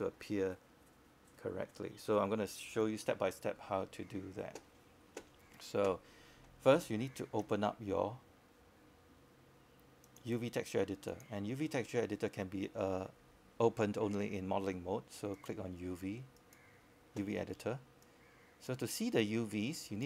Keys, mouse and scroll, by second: 4.3 alt+click, 5.8 alt+click, 6.9 scroll up 1, 7.2 alt+click, 8.1 alt+middle click, 8.6 alt+click, 9.5 alt+middle click, 9.9 scroll up 1, 10.2 alt+click, 10.5 scroll down 1, 10.9 alt+click, 11.3 alt+middle click.